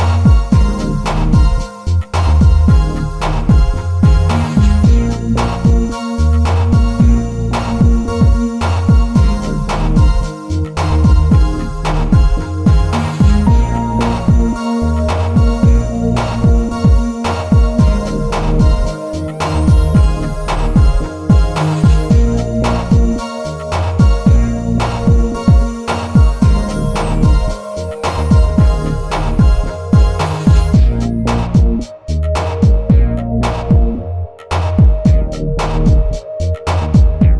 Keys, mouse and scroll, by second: 2.1 click, 3.3 click, 4.9 click, 5.4 z, 8.1 ctrl+r, 12.2 shift+middle click, 16.5 s, 19.1 click, 20.9 s, 24.1 click, 25.1 s, 27.1 shift+middle click, 27.9 click, 28.9-30.0 drag, 31.0 Tab, 31.7-32.1 middle drag, 33.0 click, 33.5 middle click, 35.1 Tab.